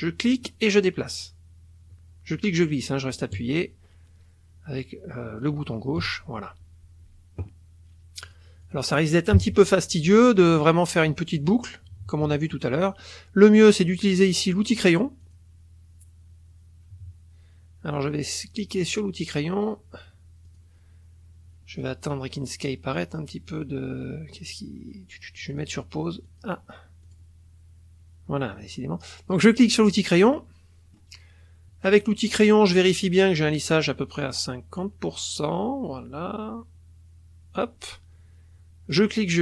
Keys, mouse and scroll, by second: 0.0-6.2 shift+drag, 8.2 click, 8.6 click, 9.4 KP_Subtract, 10.4 click, 11.6-12.7 drag, 12.8 click, 15.2 click, 18.6 click, 20.4 click, 23.5 click, 25.6 click, 26.2 click, 27.0 click, 29.5 click, 30.3-33.5 middle drag, 33.5-37.8 drag, 38.9-39.4 drag.